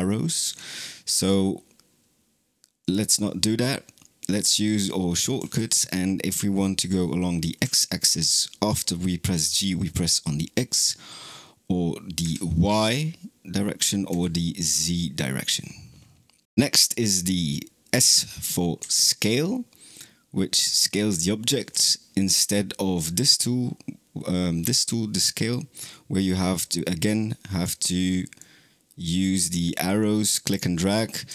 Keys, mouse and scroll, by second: 0.3 alt+g, 1.0 click, 2.6-5.2 drag, 5.2 g, 24.6-26.6 drag, 28.2 click, 29.8 click.